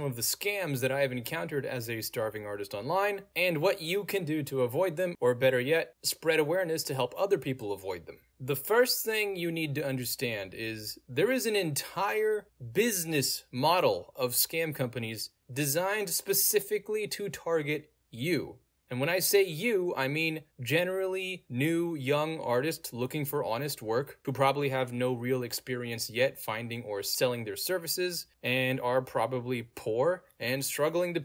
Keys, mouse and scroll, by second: 4.0 click, 5.0 click, 9.6 click, 13.5 click, 16.9 click, 18.9 click, 24.9 click, 26.1 click, 27.4 click, 28.1 scroll down 2, 29.3 click, 30.5-31.2 scroll down 2.